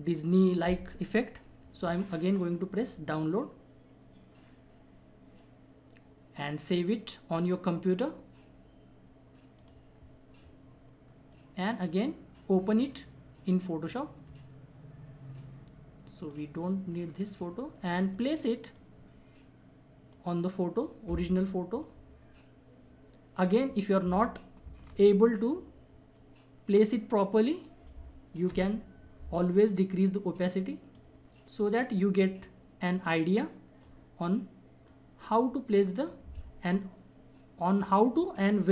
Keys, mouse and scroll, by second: 2.8 click, 9.5-24.8 drag, 24.8 ctrl+-, 26.1 click, 27.6 click, 28.5 Return, 29.9-38.0 drag, 38.1 click.